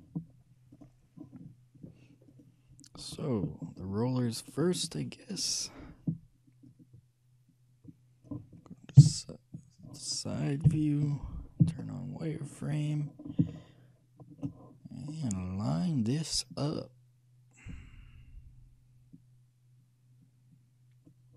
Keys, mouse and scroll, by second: 0.9-4.2 drag, 6.8-8.6 drag, 9.1 KP_3, 10.8 KP_3, 11.8 z, 13.0 middle click, 15.3-17.0 shift+middle drag, 17.0-18.6 drag.